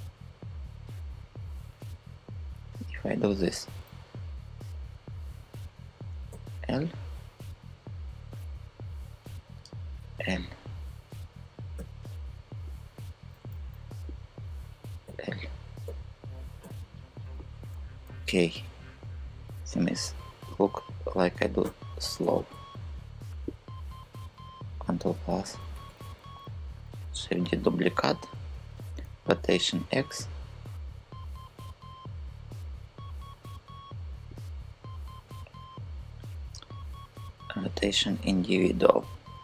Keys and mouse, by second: 5.9 l, 9.6 shift+l, 11.4 shift+l, 13.2 super+z, 14.7 shift+l, 15.5 shift+,, 16.3 shift+l, 17.0 super+z, 17.4 super+z, 18.0 super+z, 20.2 shift+click, 21.3 shift+l, 21.9 shift+l, 22.2 shift+l, 24.5 ctrl+KP_Add, 24.7 ctrl+KP_Add, 24.9 ctrl+KP_Add, 25.0 ctrl+KP_Add, 25.1 ctrl+KP_Add, 25.3 ctrl+KP_Add, 25.4 ctrl+KP_Add, 25.6 ctrl+KP_Add, 25.7 ctrl+KP_Add, 26.7 shift+d, 27.0 Return, 28.6 r, 29.1 x, 34.0-37.2 drag, 37.3-38.7 drag.